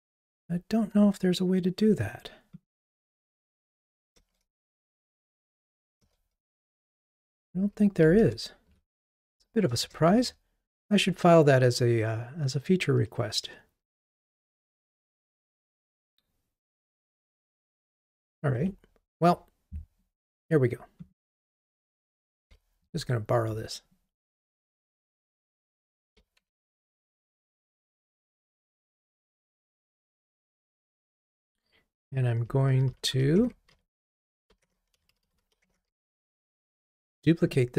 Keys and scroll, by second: 4.3 alt+Return, 18.6 Escape, 21.6 alt+Up, 25.5 alt+Up, 26.5 super+v, 33.4 super+BackSpace.